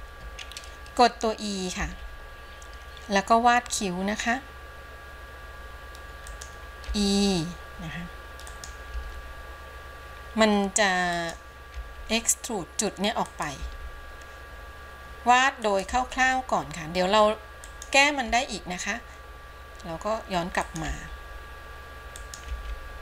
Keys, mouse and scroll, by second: 2.1 e.